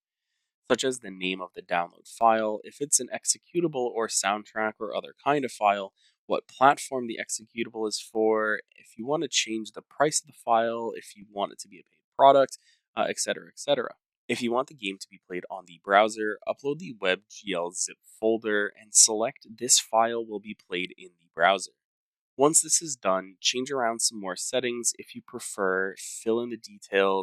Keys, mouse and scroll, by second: 0.6-3.1 scroll, 3.1 click, 3.9 click, 4.5-10.2 typing, 11.2 click, 12.6 scroll, 13.5 scroll, 14.2-14.8 scroll down 6, 15.7 scroll up 2, 16.4-17.1 scroll up 1, 17.1-17.5 scroll down 1, 17.5 scroll down 1, 18.9 scroll down 2, 19.2-20.0 scroll, 20.0 scroll, 21.0 middle click, 21.1 middle click, 21.3 middle click, 21.4 middle click, 22.0 middle click, 22.1 middle click, 22.6 middle click, 23.0-23.3 scroll, 23.7-24.8 scroll, 25.7 click, 26.6 click.